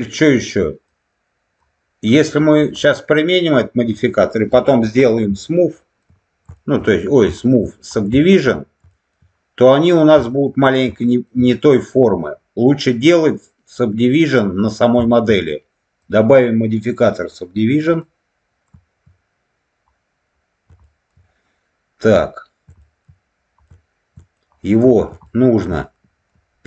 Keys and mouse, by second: 0.8 click, 2.6-3.8 middle drag, 5.6 shift+middle click, 6.5 shift+middle click, 7.3 shift+middle click, 8.1 shift+middle click, 8.8 shift+middle click, 10.2 shift+middle click, 10.9 shift+middle click, 14.9 shift+middle click, 16.0-17.9 drag, 20.8 shift+middle click, 22.7 shift+middle click, 23.6 shift+middle click, 24.8 middle click, 25.2 shift+middle click, 25.7 alt+middle click.